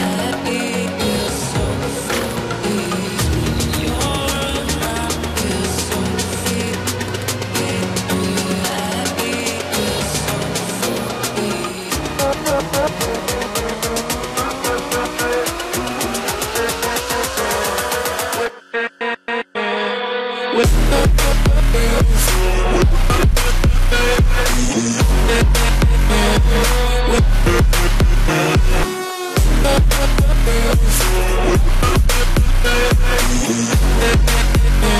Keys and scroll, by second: 1.7 ctrl+-, 31.8 ctrl+z.